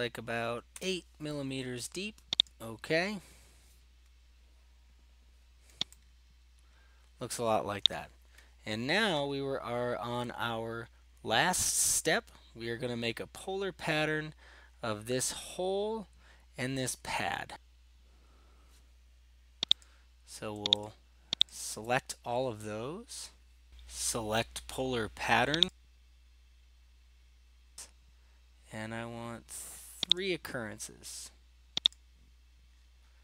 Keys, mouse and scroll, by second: 0.7 8, 2.5 click, 7.8 middle click, 8.0 right click, 9.4-10.5 scroll, 11.3-12.3 scroll, 19.8 click, 20.9 ctrl+click, 21.5 ctrl+click, 21.8 click, 25.7-27.0 drag, 27.3-27.8 middle drag, 30.2-31.3 drag, 32.0-32.4 drag, 32.9 drag.